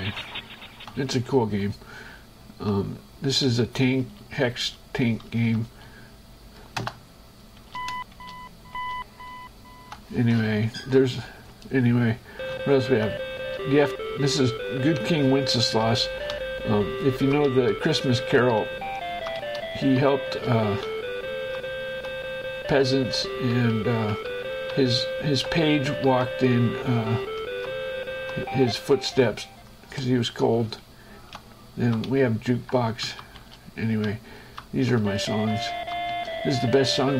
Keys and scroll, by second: 1.6 shift+Escape, 2.3 Right, 3.7 space, 5.5 Down, 6.0 space, 7.0 Return, 8.0 Right, 8.3 space, 10.5 Right, 12.7 Right, 13.6 space, 16.7 Down, 17.7 Left, 19.0 Down, 19.6 Left, 20.5 space, 21.2 Down, 22.0 Right, 22.5 Up, 23.5 Left, 24.0 Up, 24.3 Left, 25.2 Up, 26.0 Left, 26.5 Down, 28.0 Right, 30.0 shift+Escape, 30.7 Right, 31.6 Down, 32.3 Up, 33.3 Down, 33.6 space, 34.3 Down, 34.8 Right, 35.1 Down, 36.5 space.